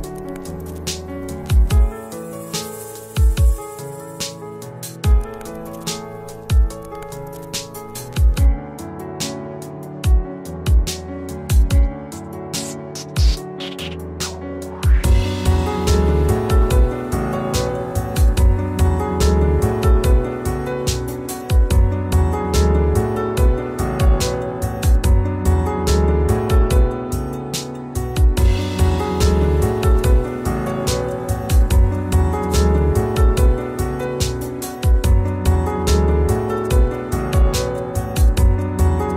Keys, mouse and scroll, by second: 7.8 ctrl+space, 8.1 ctrl+click, 8.3 ctrl+space, 10.0-10.7 typing, 12.5 f, 13.9 ctrl+space, 14.1 ctrl+click, 14.3 ctrl+space, 18.3 alt+click, 20.9 f, 23.8 click, 25.5 ctrl+space, 25.8 ctrl+click, 26.0 ctrl+space, 27.7 click, 31.9 click, 33.5-34.8 scroll down 1, 34.8-38.0 drag, 38.0-39.1 scroll down 1.